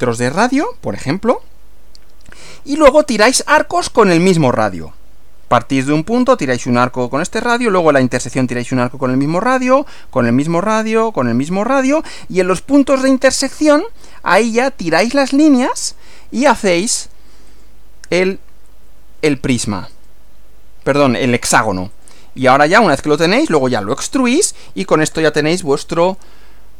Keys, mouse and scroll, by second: 17.5 click, 19.9 click, 21.5 Right, 21.9 click, 22.5 Right.